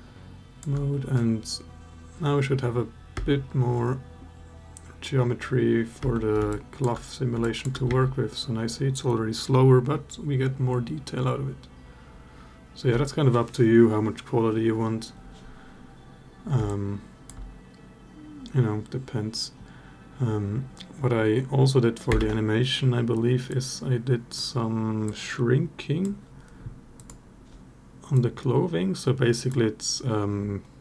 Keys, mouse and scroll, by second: 2.9 space, 5.9 space, 6.3 alt+drag, 7.2 alt+drag, 7.6 space, 16.7-17.3 alt+drag, 22.0 space, 24.8-25.8 drag, 26.7 click, 27.9 click.